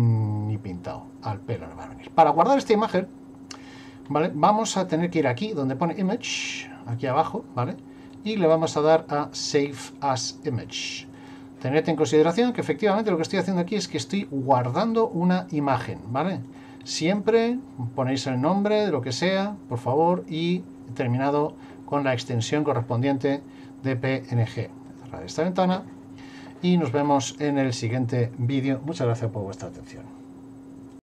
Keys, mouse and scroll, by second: 4.0 scroll up 1.